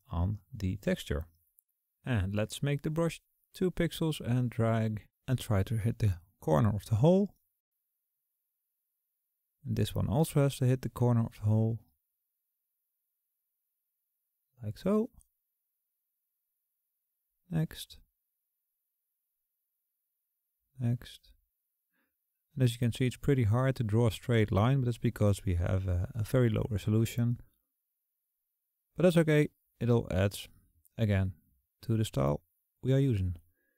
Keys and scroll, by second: 1.5 ], 12.1 [.